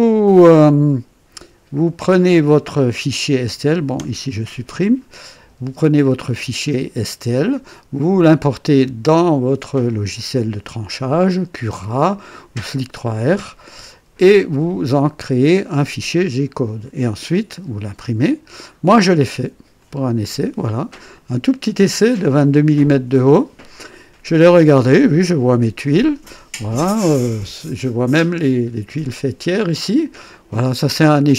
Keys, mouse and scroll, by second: 3.9 Delete, 4.1 Delete, 19.7 click.